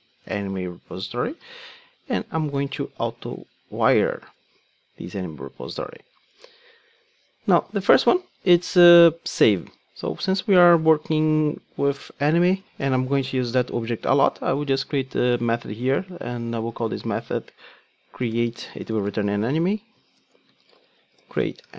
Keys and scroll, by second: 20.2 Return.